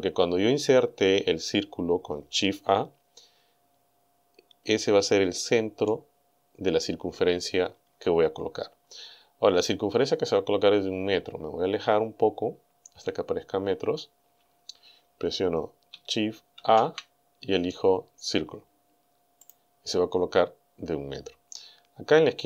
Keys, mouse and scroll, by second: 10.4-11.1 scroll down 4, 11.5-12.1 scroll down 2, 12.4-12.8 scroll down 2, 16.6 shift+a, 19.4 click.